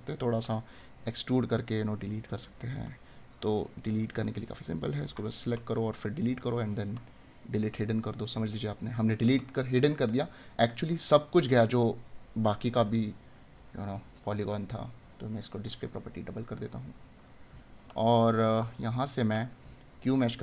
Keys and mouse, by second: 5.5 right click, 9.4 right click, 17.8 right click.